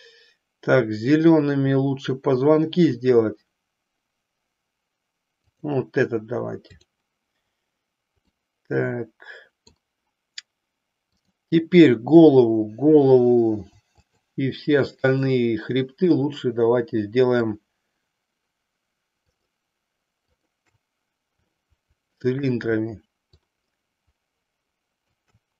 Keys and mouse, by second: 8.3-9.7 middle drag, 13.9-14.9 shift+drag, 15.0-16.2 shift+drag, 17.5 shift+click, 19.3 shift+click, 20.3-21.3 shift+drag, 21.6 shift+middle click, 23.3-25.2 shift+drag.